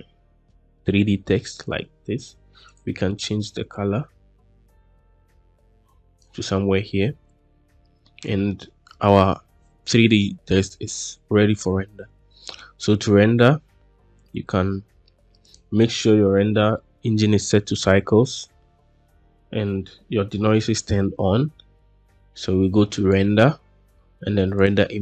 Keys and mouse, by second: 2.5 click, 8.0-8.4 middle drag, 15.3 click, 22.8-25.0 drag.